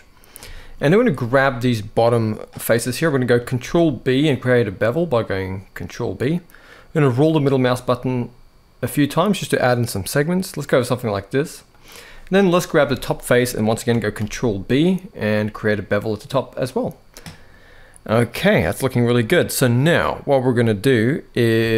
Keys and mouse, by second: 0.3 shift+middle click, 0.8 click, 3.3 ctrl+b, 12.2 click, 12.7 shift+middle click, 13.9 ctrl+b, 21.5 shift+middle click.